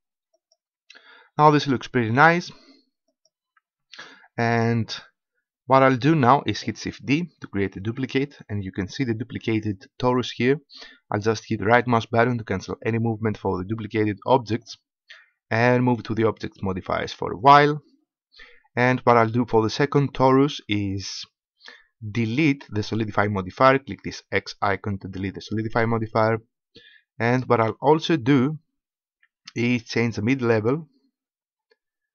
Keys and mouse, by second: 0.3-2.2 drag, 3.0-4.7 drag, 7.8 shift+d, 12.6-14.2 drag, 14.2 right click, 17.3-27.4 drag, 30.1-31.9 drag.